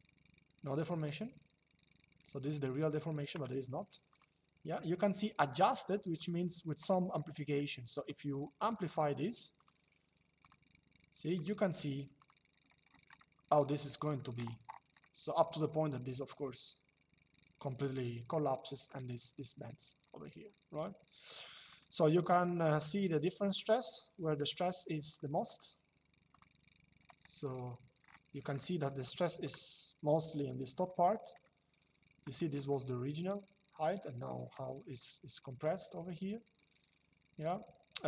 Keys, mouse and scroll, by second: 3.8 click, 5.9 click, 6.9 shift+middle click, 7.6 click, 9.3 click, 12.9 shift+middle click, 14.7 shift+middle click, 21.4 click, 23.3 shift+middle click, 24.8 click, 31.1 shift+middle click, 34.7 shift+middle click, 37.7 click.